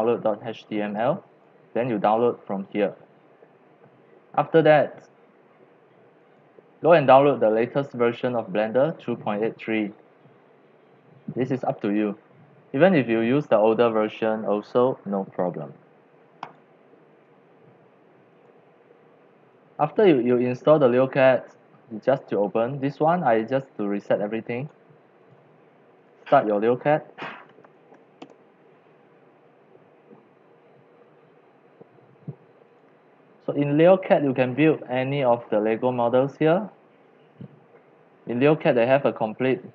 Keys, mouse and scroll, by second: 1.0 click, 1.4 click, 6.4 click, 7.3-11.6 drag, 16.6-18.5 drag, 18.5 click, 19.1-25.4 drag, 26.1 click, 27.0-28.3 typing, 30.1-32.4 typing, 32.7 click, 33.0-34.2 drag, 34.2-38.9 middle drag, 38.9-39.7 drag.